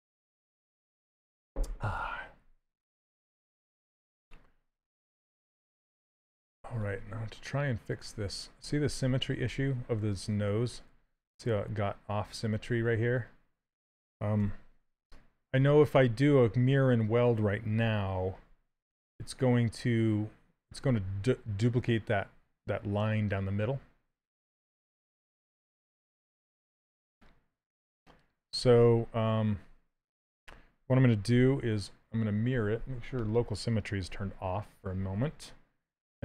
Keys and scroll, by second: 8.5 s, 10.6 s, 14.1 w, 25.3 q, 31.0 2.